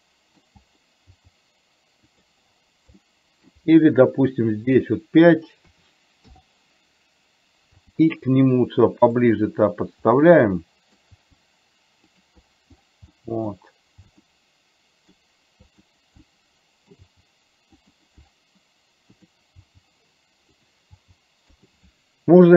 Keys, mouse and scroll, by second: 3.0 middle click, 5.0-6.4 drag, 7.8 g, 10.7 middle click, 11.2 g, 13.3 middle click, 14.2 g, 16.4-17.9 middle drag, 17.0 g, 19.7 g, 21.0 g.